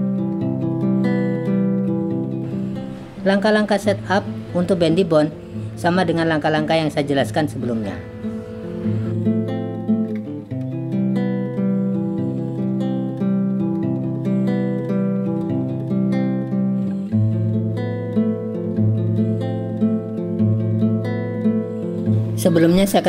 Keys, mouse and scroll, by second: 1.1 click, 2.0-2.4 drag, 3.2 click, 3.8 click, 4.9 click, 5.1 click, 6.0 click, 6.3 shift+click, 7.3 click, 7.6 shift+click, 8.6 click, 9.0 click, 10.7 drag, 11.2 drag, 12.0 click, 13.1 click, 14.0 click, 15.0 alt+p, 15.9 click, 17.4 click, 18.1 click, 18.5 click, 18.9 click, 19.6 click.